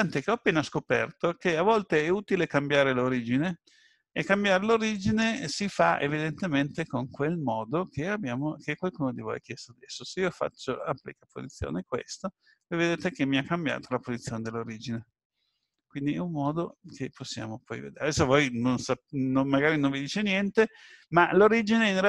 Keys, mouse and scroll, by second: 4.9 right click, 8.8 ctrl+a, 16.7 ctrl+z.